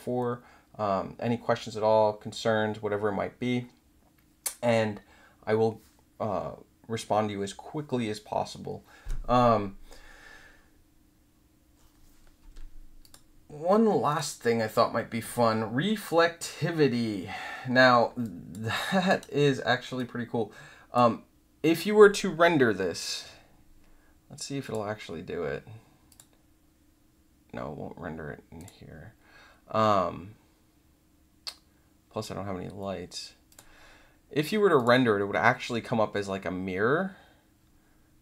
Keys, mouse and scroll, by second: 13.0 click, 14.0 click, 18.2 alt+drag, 18.7 alt+middle click, 19.0 alt+right click, 19.9-20.9 drag, 24.6 click, 26.0 click, 28.5 click, 33.4 click, 34.7 click.